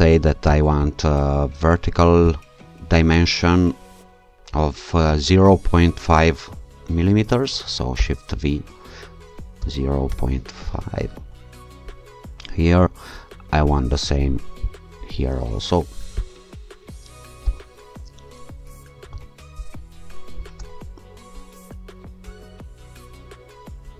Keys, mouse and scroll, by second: 0.5 click, 2.3 click, 7.9 shift+v, 9.6 0, 10.0 ., 10.6 5, 11.2 Return, 13.3-14.0 scroll up 2, 14.0 scroll up 1, 14.6 click, 16.2 click, 17.4 shift+v, 19.1 0, 19.5 ,, 20.3 5, 20.6 Return, 21.5-22.0 scroll down 2, 22.0-22.5 scroll down 1.